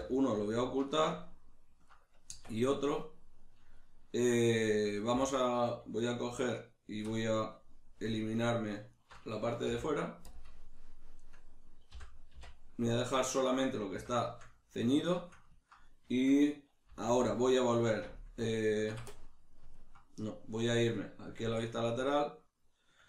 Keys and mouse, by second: 0.3 right click, 0.9-6.5 ctrl+shift+middle drag, 2.3 Tab, 5.1 3, 6.5 alt+right click, 7.1-8.3 middle drag, 8.3 alt+shift+right click, 8.9 alt+shift+right click, 9.7 x, 11.2 right click, 11.9 l, 13.2-16.1 middle drag, 14.0 a, 17.0 alt+e, 19.1 middle click, 21.4 alt+q, 22.1 shift+middle click.